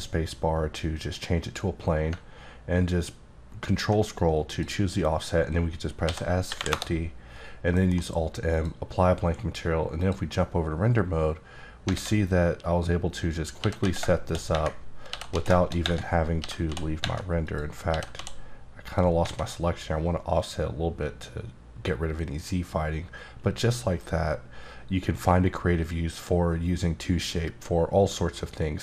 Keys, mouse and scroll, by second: 1.4 click, 2.4-3.2 ctrl+scroll down 2, 3.2-4.0 ctrl+scroll up 1, 4.0-4.5 scroll up 1, 4.5 click, 6.0 s, 6.4 KP_5, 6.5 KP_0, 6.7 KP_Enter, 7.7 alt+m, 8.5 click, 10.0 click, 11.9 alt+a, 13.6 g, 13.8 z, 15.1 g, 15.3 z, 16.4 g, 16.7 z, 17.4 click, 17.9 g, 18.1 z, 18.8 click, 19.2 alt+a.